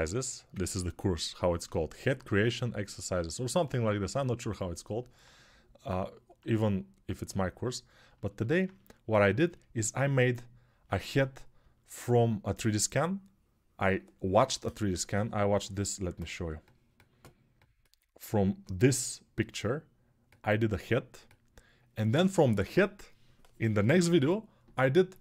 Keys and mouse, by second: 12.0 3, 16.1-17.1 drag, 17.3-25.2 drag.